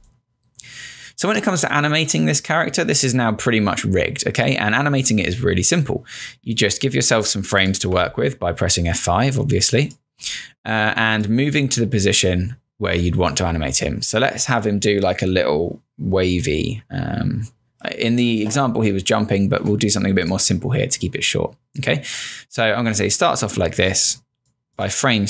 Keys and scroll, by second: 0.0 space, 1.4 space, 8.0 F5, 10.1 F5.